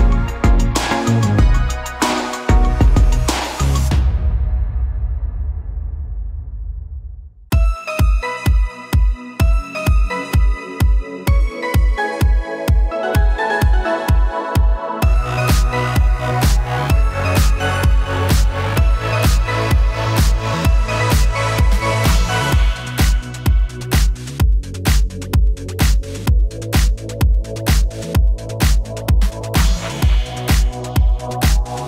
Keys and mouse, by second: 1.2 f, 1.6-6.8 drag, 6.5 ctrl+z, 6.6 f, 6.8 middle click, 6.8 f, 7.2-14.8 drag, 14.3 Tab, 14.7 Tab, 14.8 middle click, 14.8 1, 15.0 g, 15.4 click, 15.5-19.4 middle drag, 15.5 g, 16.1 g, 17.5-19.8 typing, 19.4 click, 19.8 middle click, 20.6 shift+click, 20.9 shift+g, 21.6 shift+middle click, 22.0 shift+click, 22.0-26.6 typing, 22.1-25.3 middle drag, 22.4 click, 25.3 click, 25.4-27.5 middle drag, 27.0 Tab, 27.5-31.8 drag, 31.8 middle click, 31.8 f.